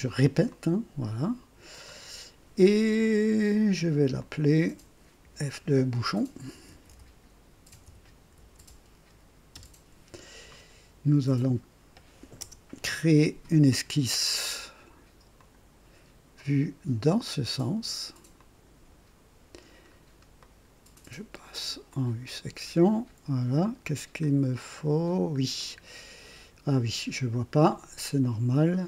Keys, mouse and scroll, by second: 0.4 click, 1.8 click, 4.1 click, 5.2 F2, 6.2-11.1 typing, 12.3 KP_0, 15.3 click, 18.3 click, 19.8-20.1 scroll up 1, 20.4-21.0 right drag, 21.9 click, 23.0-23.3 scroll up 1, 24.4 scroll down 1, 25.0 scroll down 1, 25.3 scroll up 1, 25.5-26.8 right drag.